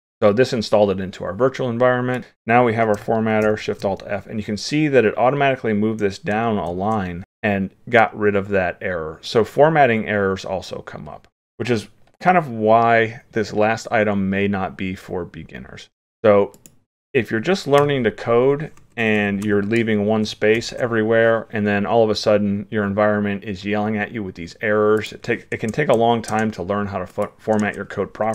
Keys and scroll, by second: 3.5 alt+shift+f, 6.7 ctrl+s, 20.6 ctrl+s.